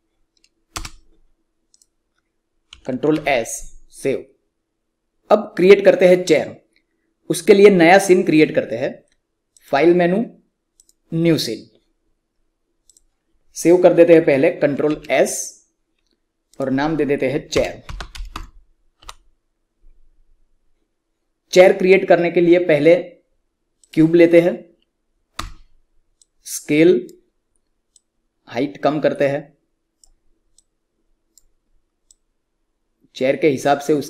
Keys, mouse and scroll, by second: 0.6 space, 1.6 click, 3.0 ctrl+s.